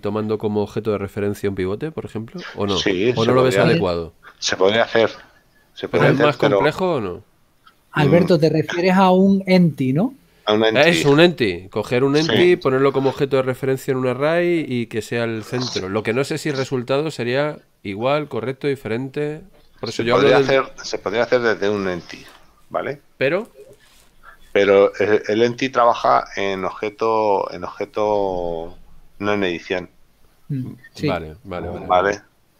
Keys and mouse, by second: 8.4 middle click.